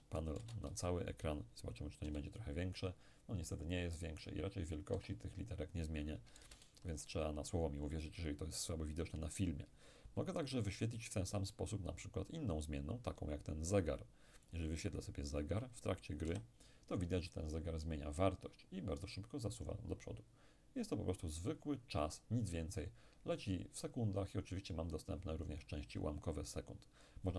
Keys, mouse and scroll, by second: 0.4 shift+space, 2.1 p, 5.0 Escape, 6.4 shift+space, 11.7 click, 14.5 click, 16.3 p.